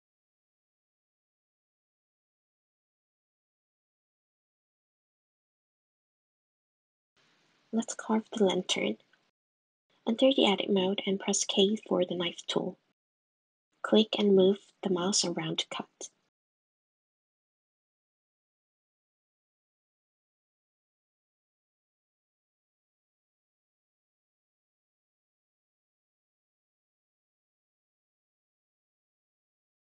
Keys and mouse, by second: 0.1 click, 7.5 middle click, 8.4 Tab, 10.4 middle click, 12.1 click, 14.4 k.